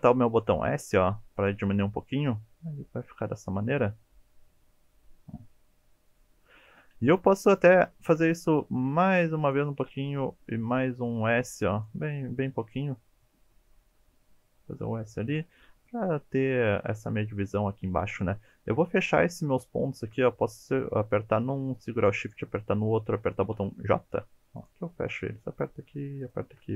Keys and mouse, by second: 1.4 click, 1.7-6.8 middle drag, 6.8 KP_1, 7.7 shift+middle click, 8.5 e, 9.5 click, 11.5 s, 11.7 click, 13.4-16.4 middle drag, 18.0 1, 18.7 click, 20.5 click, 23.6 j, 26.2 shift+click.